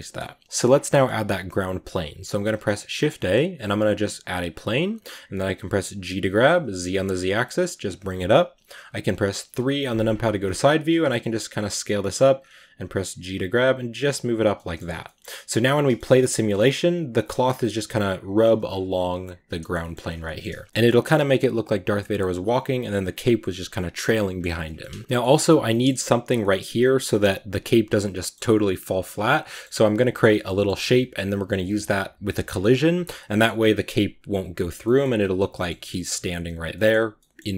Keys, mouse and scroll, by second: 0.1 Tab, 0.3 scroll down 1, 0.8-4.3 middle drag, 4.3 shift+a, 4.5-5.5 scroll down 2, 5.5 g, 9.3 KP_3, 9.9-11.2 scroll up 8, 11.2 s, 11.7 g, 12.2-13.0 scroll up 3, 13.0 g, 14.4-14.7 middle drag, 14.7-15.3 scroll down 2, 15.3 middle click, 15.5 right click, 15.7-17.3 shift+middle drag, 17.3-18.5 scroll up 1, 18.5 scroll down 1, 18.7 right click, 19.4-19.8 shift+middle drag, 19.8 scroll up 3, 20.0 a, 20.1-22.0 middle drag, 22.0-24.0 scroll up 1, 24.0 middle click, 24.2 scroll down 3, 24.5-34.6 middle drag, 28.7-29.3 scroll, 34.6 scroll up 1, 34.7-37.5 middle drag.